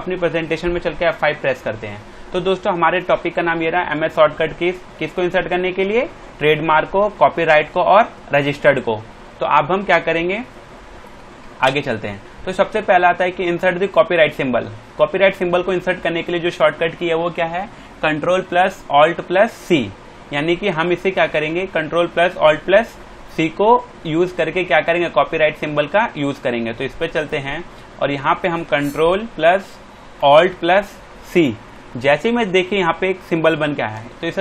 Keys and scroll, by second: 0.9 F5, 11.6 space, 31.3 ctrl+alt+c, 33.3 shift+Left.